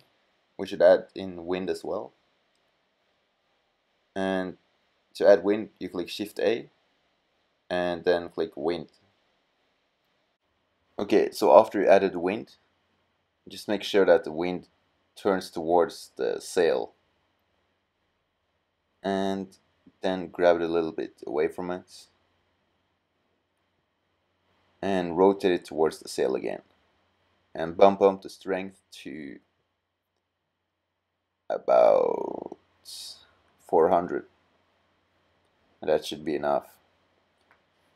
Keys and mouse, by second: 4.8 middle click, 5.5 shift+a, 11.3 r, 17.1 g, 18.6 click, 23.5 r, 33.4 KP_0.